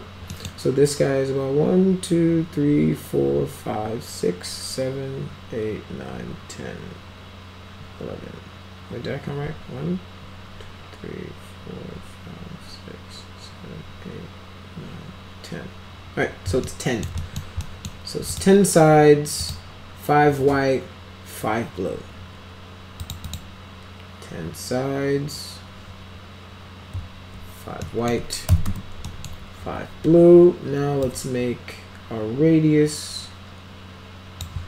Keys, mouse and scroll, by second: 0.3 middle drag, 16.7-17.1 alt+middle drag, 17.2 middle click, 17.6 middle click, 18.3 click, 19.4 click, 23.0 click, 23.3 click, 27.8 middle click, 28.2-29.2 typing, 29.1 middle click, 31.0-34.4 drag.